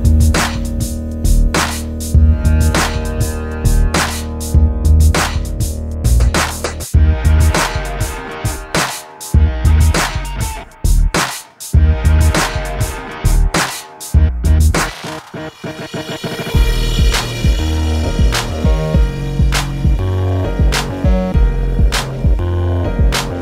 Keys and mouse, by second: 0.3 middle click, 0.7 ctrl+shift+b, 2.7 i, 3.9 alt+s, 6.0 alt+s, 7.5 ctrl+z, 9.1 alt+s, 9.8 ctrl+KP_Subtract, 10.0 alt+s, 11.9 middle click, 12.3 ctrl+s, 13.3 a, 14.5 middle click, 14.9 right click, 15.3 right click, 15.5 j, 17.6-20.6 typing, 20.7 middle click, 21.8 j, 22.6 j, 23.2 j.